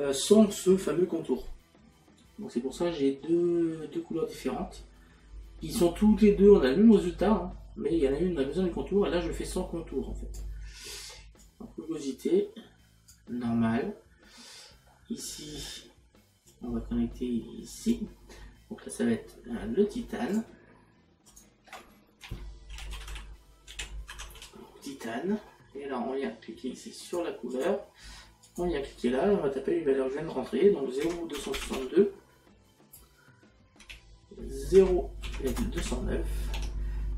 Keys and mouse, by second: 7.0 click, 14.9 middle click, 16.5 click, 20.3 click, 27.1 click, 31.1 KP_Decimal, 34.8 KP_Decimal, 36.6 Tab.